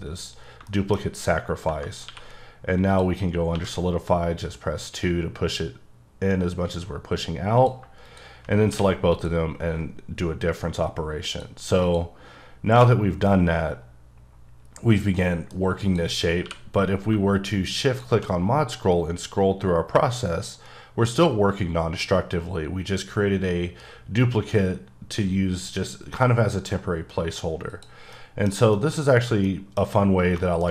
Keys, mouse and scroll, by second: 1.0-1.6 scroll up 1, 2.0 q, 2.9 click, 3.5 2, 7.6 click, 8.7 q, 9.1 click, 11.3 click, 11.8 click, 12.7 h, 12.9-13.3 scroll down 1, 13.3-15.7 middle drag, 15.8 click, 16.4 q, 17.9 shift+click, 18.4-19.5 scroll up 6, 19.5-19.9 scroll down 4, 19.9 scroll up 1, 20.0 scroll, 20.2-20.5 scroll up 4, 20.5-21.1 scroll down 5, 21.1-21.8 scroll up 5, 21.8-22.3 scroll down 4, 22.3-23.0 scroll up 5, 23.0-23.6 scroll down 4, 23.6-24.6 scroll up 3, 25.1-27.2 scroll up 1, 27.7 click, 28.1 middle click, 28.7-29.4 shift+scroll down 2, 29.4 middle click.